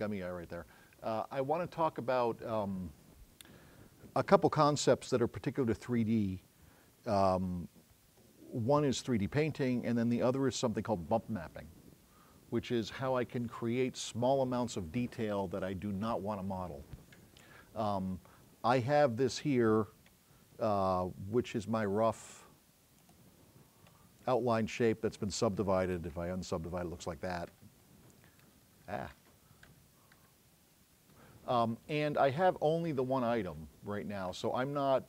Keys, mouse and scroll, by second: 20.6 scroll up 2, 21.2 scroll up 2, 23.0 click, 26.4 Tab.